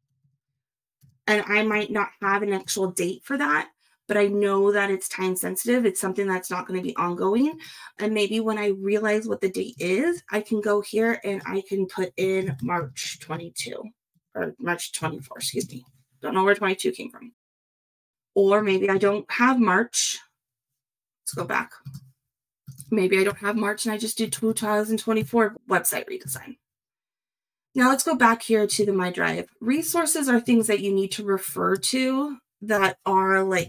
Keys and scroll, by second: 12.4 shift+m.